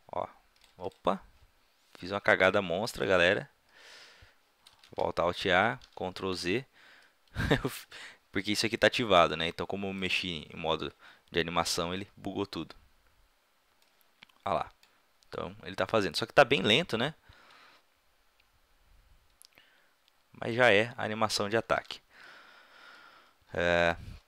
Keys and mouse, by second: 3.0 Escape, 4.8 alt+a, 5.8 ctrl+z, 9.9-11.8 drag, 11.9 alt+a, 13.9-19.9 middle drag, 21.8 alt+a.